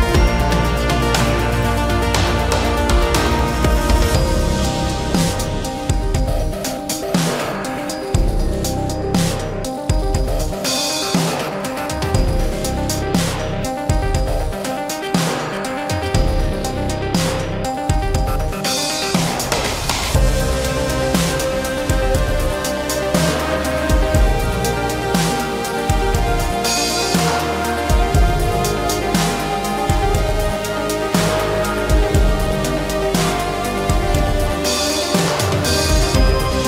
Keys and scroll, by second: 0.7 ctrl+g, 6.9 space, 7.9 p, 9.2-10.2 typing, 9.9 Return, 11.2 ctrl+g, 13.2 m, 29.8 space, 29.9 Escape, 31.9 g, 36.0 m.